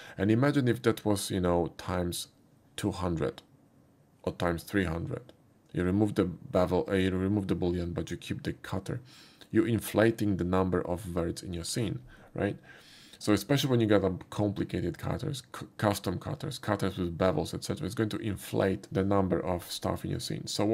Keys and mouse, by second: 0.6 click, 16.0 typing.